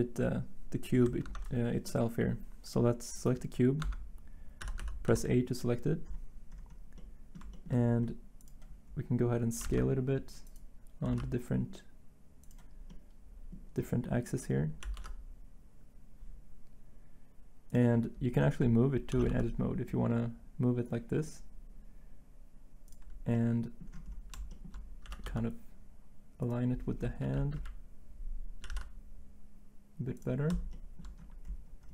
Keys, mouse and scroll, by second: 1.2 ctrl+Tab, 3.8 Tab, 4.6 a, 9.6 s, 9.6 z, 11.0 s, 14.8 s, 14.9 y, 19.1 g, 19.2 y, 25.0 g, 25.2 y, 27.5 1, 28.6 s.